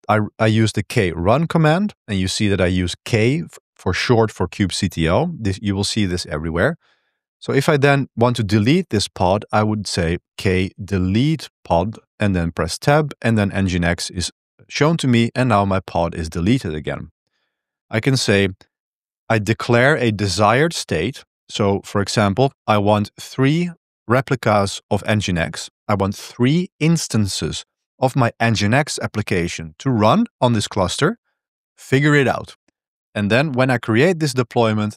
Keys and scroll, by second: 10.1-12.0 typing, 13.3 Return, 17.3 ctrl+b, 17.3-18.6 typing, 21.9-22.5 typing.